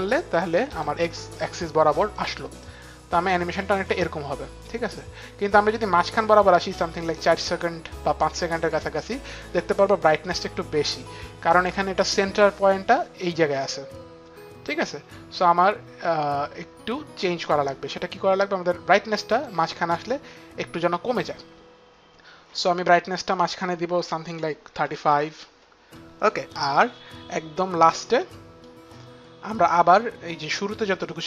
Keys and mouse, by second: 2.5 click, 8.3 click, 22.9 click, 24.4 KP_3, 24.6 KP_5, 24.7 Return, 27.7 click.